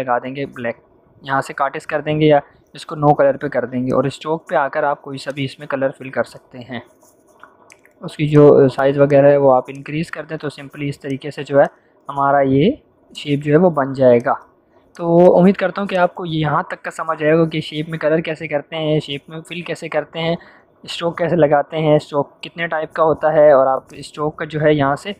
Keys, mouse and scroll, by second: 3.8-8.9 drag, 9.9-10.3 click, 13.4 click, 23.8 click.